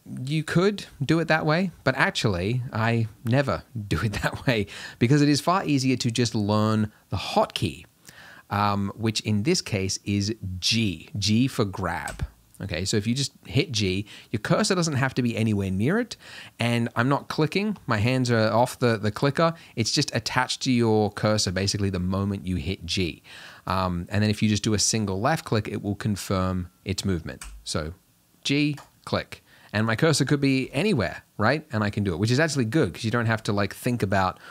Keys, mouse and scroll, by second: 5.3-12.2 drag, 12.2 g, 27.5 g, 30.7 g.